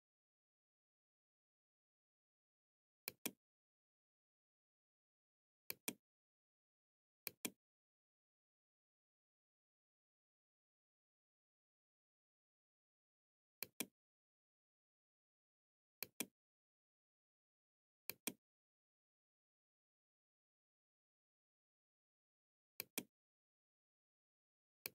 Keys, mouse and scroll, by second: 2.2 click, 4.8 click, 6.4 click, 12.5 click, 15.1 click, 17.2 click, 21.5-22.6 drag, 23.9 click.